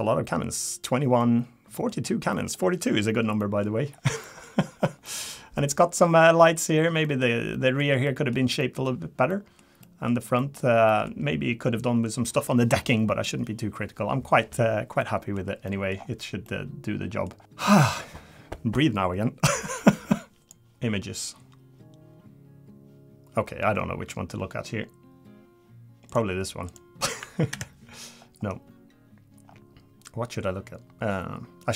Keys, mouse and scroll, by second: 1.2 middle click, 1.9 scroll down 4, 2.3 middle click, 3.4 middle click, 3.9 scroll down 2, 4.2 middle click, 4.6 scroll up 2, 5.0 middle click, 5.6 middle click, 6.4 middle click, 7.0 middle click, 7.5 middle click, 8.0 middle click, 8.6 middle click, 9.3 middle click, 9.8 middle click, 10.4 middle click, 10.9 middle click, 11.4 scroll up 2, 15.0 middle click, 15.7 middle click, 15.9-17.0 scroll down 4, 16.4 middle click, 17.4 scroll down 1, 17.4-17.7 scroll up 4.